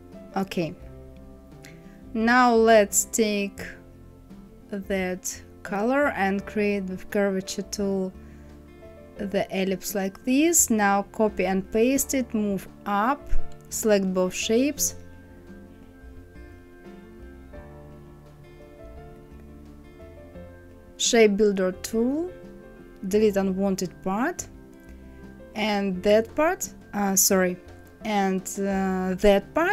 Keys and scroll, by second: 10.8 ctrl+c, 11.3 ctrl+f, 18.1 Right, 18.5 Down, 26.9 ctrl+z.